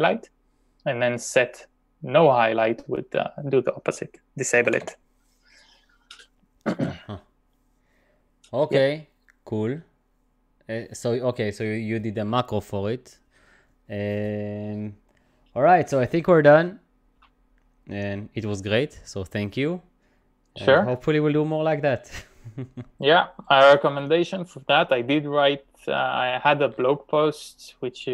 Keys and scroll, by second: 4.7 typing.